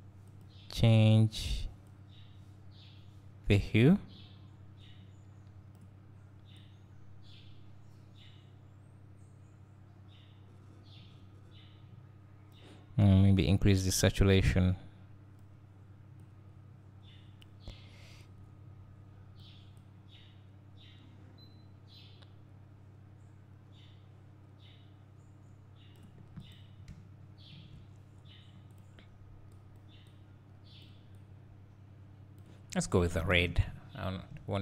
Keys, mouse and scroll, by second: 26.9 `, 29.6 click, 33.0-33.7 scroll up 1, 33.7 `.